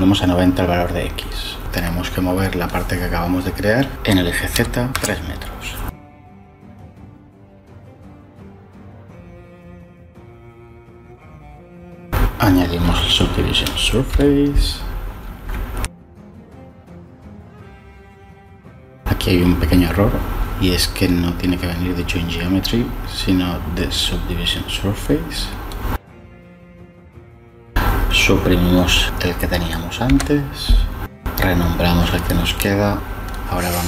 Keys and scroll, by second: 0.0-0.5 typing, 0.7 Return, 4.8 3, 5.0 Return, 14.0 m, 30.4 Delete, 32.4 Delete, 32.8 Return.